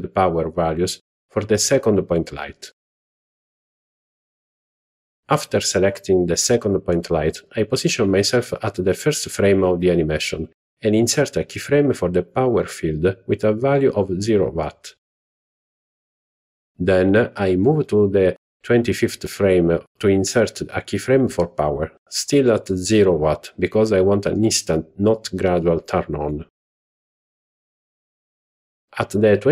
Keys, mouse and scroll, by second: 3.8 click, 17.2-19.4 drag, 21.5 i, 29.3 click.